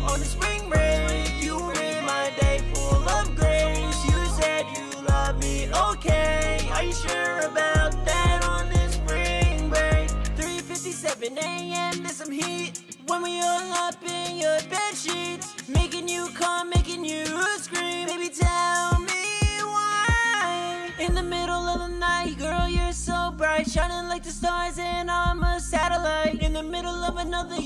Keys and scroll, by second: 23.9-25.3 typing, 26.5 typing.